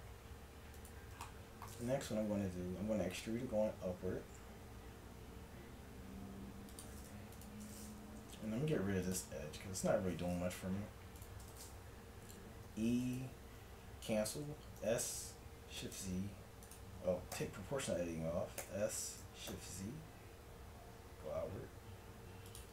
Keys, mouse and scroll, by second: 0.8-2.7 drag, 2.3 e, 7.4-9.2 drag, 8.2 x, 9.7 a, 11.2-13.0 drag, 12.7 e, 14.8 s, 17.4 o, 18.6 s.